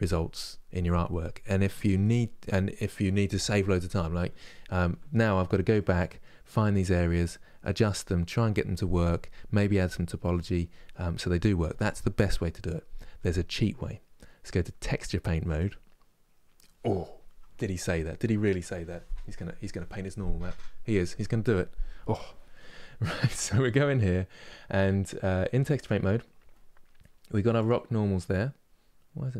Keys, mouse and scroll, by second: 5.0-5.3 scroll down 1, 5.4-15.3 middle drag, 15.3 click, 21.8 middle click, 22.5 scroll up 4, 23.1-25.8 middle drag, 25.8 click, 27.2-28.8 drag, 28.8-29.3 scroll down 3.